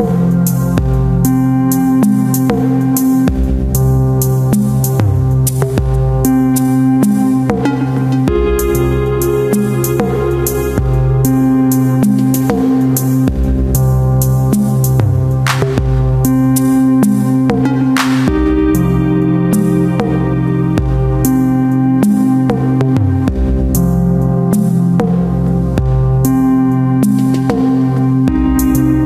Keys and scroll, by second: 0.7 ctrl+KP_Add, 1.4 space, 2.9 space, 6.2 shift+F2, 6.8 ctrl+d, 6.9 ctrl+space, 10.8 Return, 11.5 shift+F2, 12.0 ctrl+KP_Add, 12.4 ctrl+g, 14.2 ctrl+space, 14.6 Return, 19.6 space, 20.2 s, 20.5 ctrl+space, 22.8 space, 26.6 space.